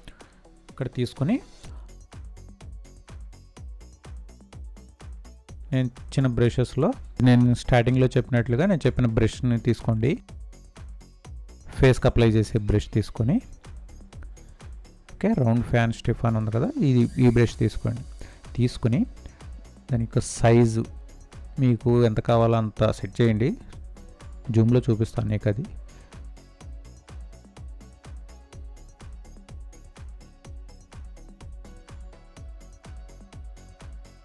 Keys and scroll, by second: 33.6 ctrl+space, 34.0 ctrl+space.